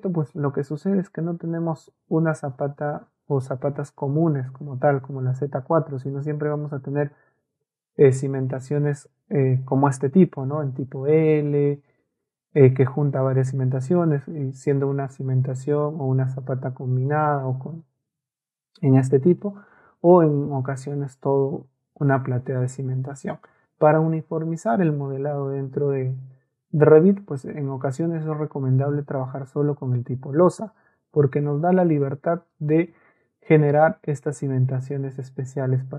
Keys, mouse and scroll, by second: 2.4 Escape, 17.4 middle click, 19.0 middle click, 19.7 middle click, 23.1 middle click, 23.1-23.6 scroll up 1.